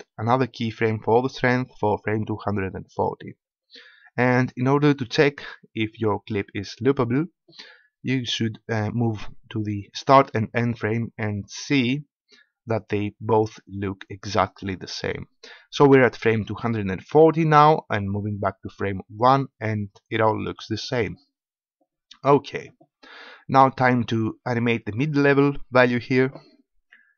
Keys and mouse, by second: 9.3-11.4 middle drag, 11.4-15.0 drag, 15.0 middle click, 19.2-21.0 drag.